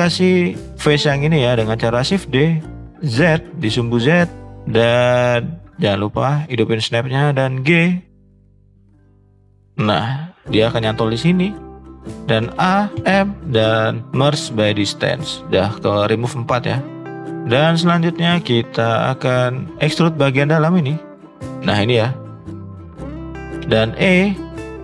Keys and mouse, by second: 1.1 middle click, 2.0 shift+d, 4.4 middle click, 4.5 middle click, 5.0 middle click, 6.4 click, 8.4 g, 10.3 middle click, 12.4 a, 12.9 m, 17.4 middle click, 18.7 click, 19.0-20.2 drag, 20.7 shift+click, 21.4 shift+click, 22.6 shift+middle click, 22.8 middle click, 22.9 shift+middle click, 23.1 shift+middle click, 23.6 e.